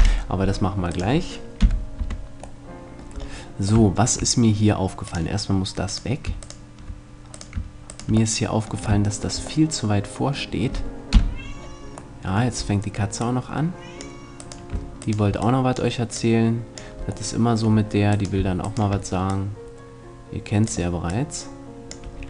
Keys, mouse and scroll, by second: 0.0 F11, 1.0 right click, 1.6 KP_Decimal, 2.1 Tab, 5.1-6.2 shift+drag, 5.9 shift+right click, 7.0-9.0 right drag, 9.0-11.1 middle drag, 11.1 KP_Decimal, 12.2-13.2 middle drag, 13.2-14.7 drag, 14.4 right click, 14.7-17.3 middle drag, 17.3 click, 18.1-19.3 middle drag, 22.1 a.